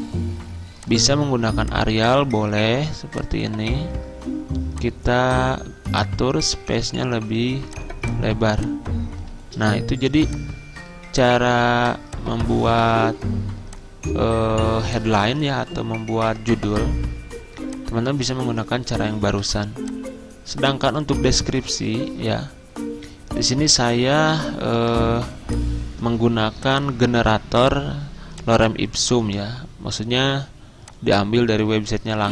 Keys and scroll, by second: 9.6 c, 24.8 super+m, 29.3 ctrl+c.